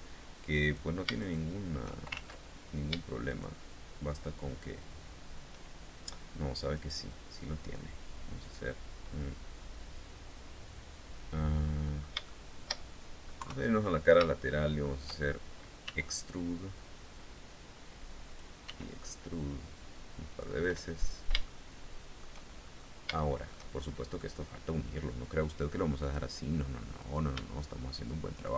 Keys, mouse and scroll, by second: 0.1 right click, 0.7 shift+right click, 1.7 ctrl+shift+z, 2.8 shift+right click, 6.3 right click, 11.1 middle click, 11.8 shift+middle click, 12.9 KP_3, 13.8 shift+middle click, 15.4 e, 17.8 click, 18.2 e, 19.8 click, 20.2-21.9 middle drag, 22.1-22.5 shift+scroll up 3, 22.7 shift+middle click, 23.6 scroll up 2, 25.5 click, 26.5 right click, 28.0 shift+right click.